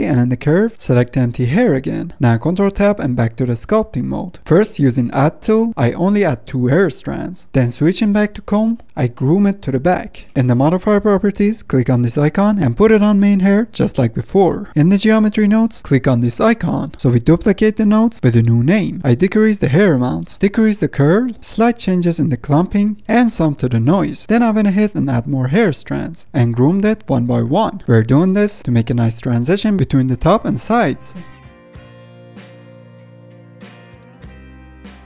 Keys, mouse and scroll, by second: 0.0 shift+a, 0.6 shift+a, 4.9 click, 5.6-7.9 drag, 7.9-8.4 middle drag, 8.4 drag, 8.7-9.0 middle drag, 9.0-10.2 drag, 10.2 middle click, 10.8-14.6 drag, 14.6 middle click, 14.8-16.4 drag, 16.4 middle click, 16.8 scroll down 1, 16.9 scroll up 1, 17.0-17.6 scroll down 1, 17.6-19.3 middle drag, 19.3-20.3 drag, 20.3 scroll down 2, 20.7 click, 21.4 scroll up 2, 21.8-23.0 drag, 23.0 middle click, 23.1-24.2 drag, 24.2-24.5 scroll up 1, 25.1 click, 25.8 F10, 25.9 middle click, 26.1 click, 26.3 ctrl+z, 26.4 shift+middle click, 26.7 click, 27.0 f, 27.2 click, 27.4 middle click, 27.5 shift+click, 27.6 middle click, 27.7 click, 27.8 middle click, 27.9 f, 28.0-28.6 drag, 28.6-28.9 middle drag, 28.9 click, 29.4 f, 29.5-30.0 drag, 30.0-30.4 middle drag, 30.4 click, 30.5 middle drag, 30.6 click, 30.7 middle click, 30.8 scroll up 1, 30.8 click, 30.9 middle click, 31.0 drag, 31.3 middle click, 31.3 click, 31.5-31.8 shift+middle drag, 31.8 ctrl+Tab, 31.9 middle click, 32.1 ctrl+z, 32.1 click, 32.5 middle click, 32.6 click, 32.7 ctrl+z, 32.8 click, 33.1-33.5 shift+middle drag, 33.5 scroll down 3, 33.6 f, 33.7-34.4 drag, 34.4-34.7 middle drag, 34.7 drag, 34.8 middle drag.